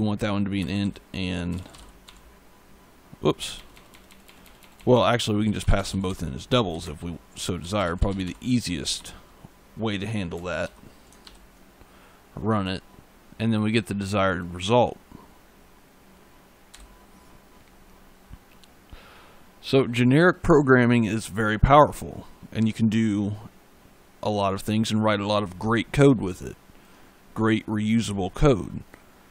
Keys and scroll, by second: 0.4-3.2 typing, 5.0-8.6 typing, 10.5 ctrl+s, 11.1 ctrl+F5, 16.6 e.